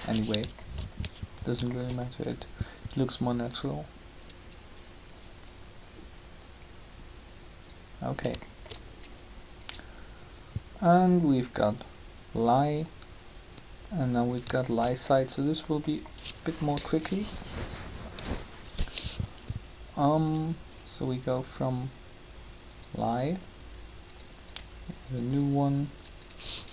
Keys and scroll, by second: 17.6 3, 26.6 2.